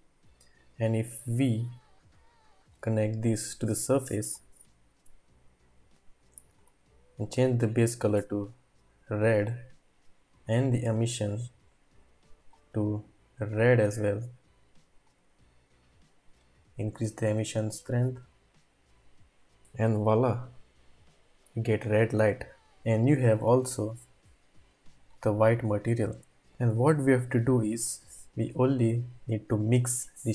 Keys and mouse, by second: 1.2-2.0 drag, 3.9 click, 16.8-20.0 drag, 20.0 ctrl+s, 24.1-25.5 drag, 27.9 click, 29.8 click, 30.0 typing.